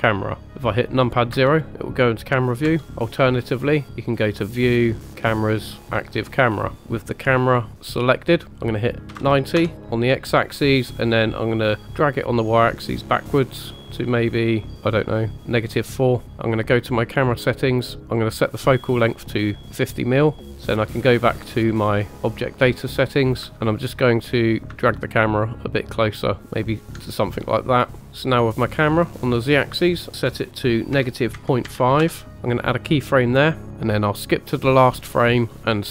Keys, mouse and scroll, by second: 1.3 KP_0, 2.6 KP_0, 4.2-6.8 drag, 6.8-7.1 scroll down 2, 7.1 click, 8.6 click, 11.8-15.3 ctrl+drag, 16.7 click, 20.5 click, 23.5 ctrl+click, 23.8 click, 24.9 ctrl+middle click, 29.5-32.0 drag, 32.7 click, 34.2 click.